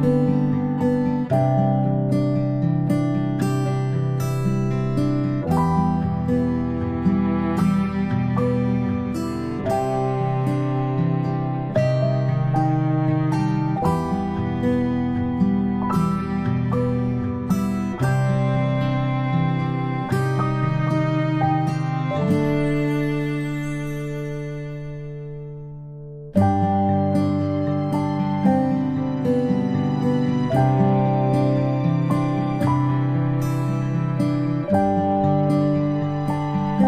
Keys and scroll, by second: 4.4-4.7 ctrl+space, 5.2 space, 5.3 space, 6.1 space, 7.5 space, 7.8 space, 7.9 space, 8.7 v, 10.7-11.3 typing, 13.3 ctrl+g, 14.6 ctrl+z, 17.5 ctrl+g, 19.3-24.4 typing, 28.2 space, 28.5 space, 28.5 space, 34.1 ctrl+z, 34.5 space, 34.7 space.